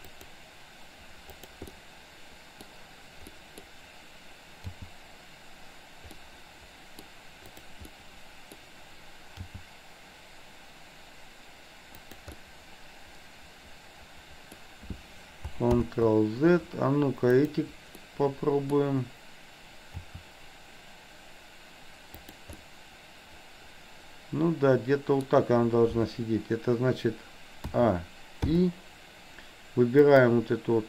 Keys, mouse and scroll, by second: 1.2-1.6 drag, 1.8-2.6 middle drag, 3.3 middle click, 4.7 g, 6.2 middle click, 7.5 click, 8.0-8.6 middle drag, 9.5 g, 12.3-14.6 middle drag, 15.7 ctrl+z, 17.5 click, 18.0 middle click, 20.0 r, 22.5-25.2 middle drag, 27.8 a, 28.5 i, 30.1 click.